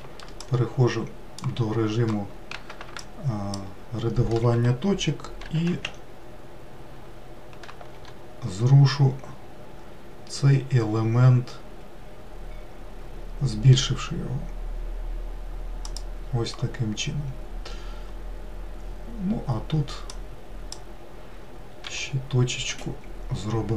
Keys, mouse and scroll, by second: 2.4 shift+click, 4.9 g, 19.5 click, 21.3 g.